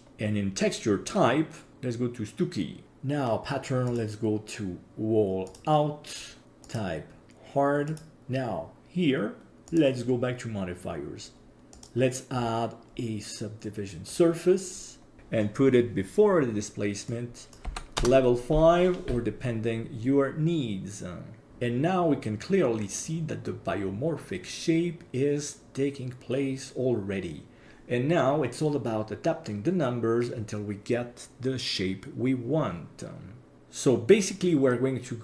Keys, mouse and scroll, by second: 1.7 click, 2.8-3.9 scroll down 8, 3.9-5.6 drag, 6.6-8.1 drag, 9.7 click, 11.7-14.2 drag, 17.1-21.5 drag, 23.1-26.2 scroll up 1.